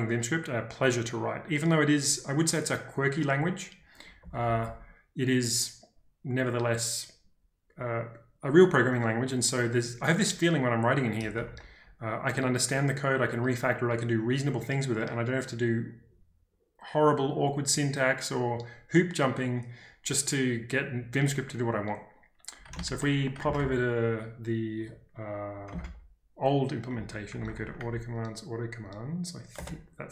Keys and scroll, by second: 4.2 k, 4.4 k, 4.6 k, 11.4 ctrl+d, 22.8 ctrl+space, 22.8 z, 23.5 ctrl+space, 23.5 l, 25.7-30.1 typing.